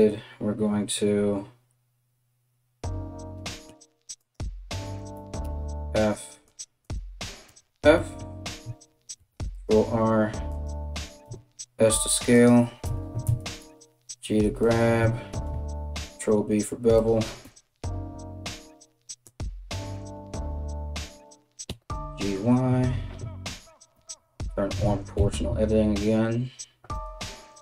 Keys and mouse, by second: 3.8 click, 4.4 shift+click, 5.0 f, 5.6 click, 6.0 click, 6.4 click, 7.0 f, 8.7 ctrl+r, 10.8 s, 12.4 g, 14.9 ctrl+b, 17.0 KP_3, 18.8 right click, 19.4 right click, 21.3 g, 23.5 o, 24.4 g.